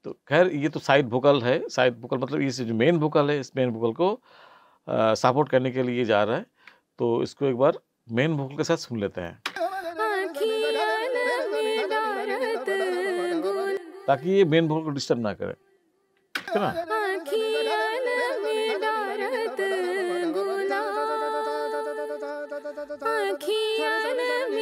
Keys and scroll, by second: 9.5 space, 13.7 space, 16.3 space.